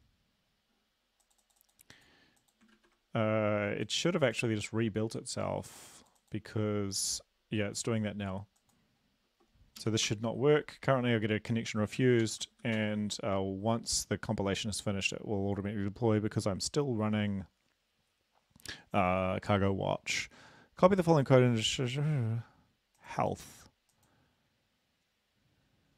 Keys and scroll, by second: 2.8 ctrl+`, 9.8 Up, 10.2 Return, 12.3 ctrl+l, 12.7 Up, 12.8 Return.